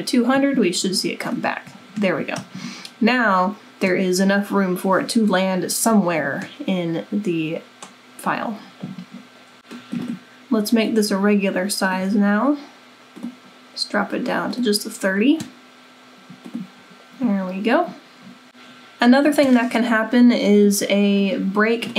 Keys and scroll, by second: 1.6-2.4 typing, 5.9-6.6 typing.